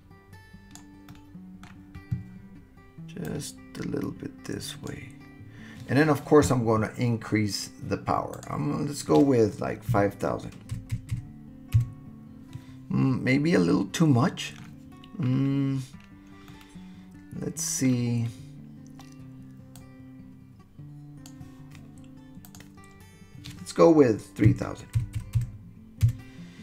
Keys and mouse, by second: 1.1 middle click, 3.2-4.9 drag, 8.5-12.5 drag, 10.9 KP_0, 13.3-14.6 middle drag, 16.5-18.0 middle drag, 19.8-21.3 drag, 22.5-26.6 drag, 25.2 KP_0.